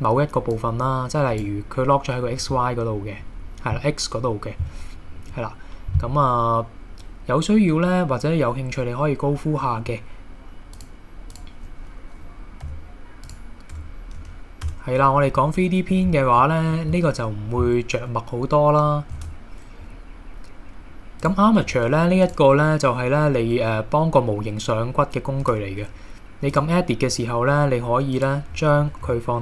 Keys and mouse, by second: 0.5 click, 2.4 middle click, 9.6 middle click, 10.8-11.4 drag, 12.7 x, 13.7 Tab, 14.2 KP_1, 14.7 Tab, 15.4-16.0 drag, 16.4-16.7 drag, 19.2 shift+a, 21.6 KP_1, 22.3 click, 25.4 Tab, 27.1 click, 28.2 click, 28.8 a, 29.0 s.